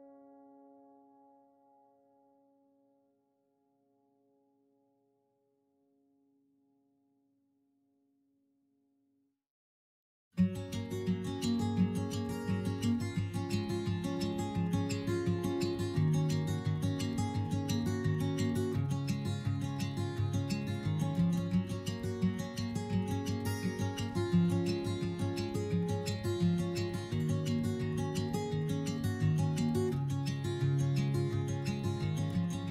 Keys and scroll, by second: 3.0 s, 5.7 s, 6.9 s, 9.0 s, 12.4 2, 19.6 3, 25.4 s.